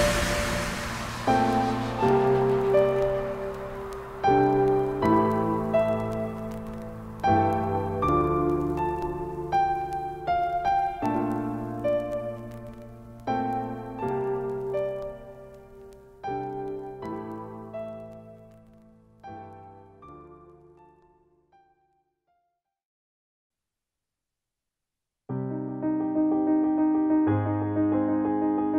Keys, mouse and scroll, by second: 12.5 ctrl+space, 12.8 ctrl+click, 12.8 ctrl+space, 14.4-17.8 drag, 17.8 shift+Left, 22.5 click, 22.7 space, 23.9-28.7 shift+drag.